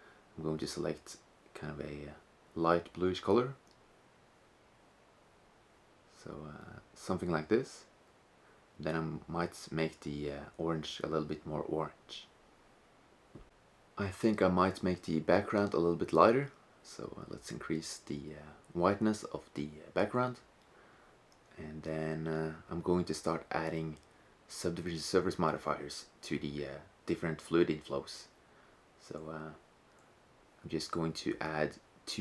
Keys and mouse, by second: 7.6 click, 10.7-12.6 middle drag, 14.8-17.7 drag, 20.0 right click, 22.4 shift+z, 23.7-26.4 drag, 28.9-30.4 right drag, 30.3 drag, 30.8-32.2 drag.